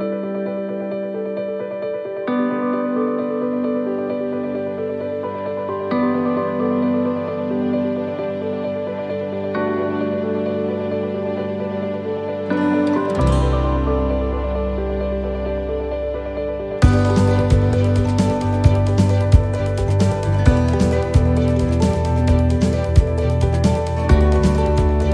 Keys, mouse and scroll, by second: 0.7 middle click, 1.6-1.9 scroll down 1, 2.0 middle click, 3.0 scroll up 1, 3.5 shift+middle click, 6.3 scroll down 1, 8.7 right click, 9.4 right click, 10.0 l, 11.2 click, 17.9 right click, 17.9 l, 19.1 shift+d, 24.2 click, 24.9 click.